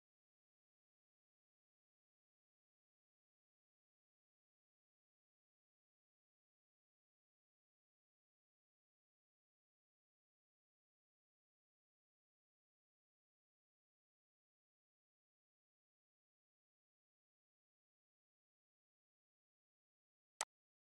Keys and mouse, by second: 20.0 click.